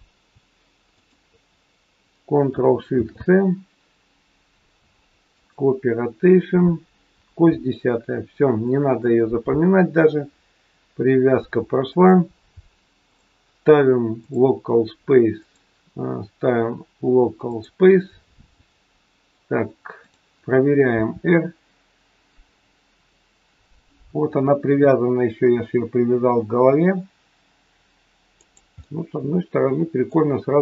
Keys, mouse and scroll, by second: 1.0 shift+click, 2.8 ctrl+shift+c, 13.1 click, 15.3 click, 20.0 click, 21.0 r, 28.8 middle click, 30.3-30.6 scroll down 2.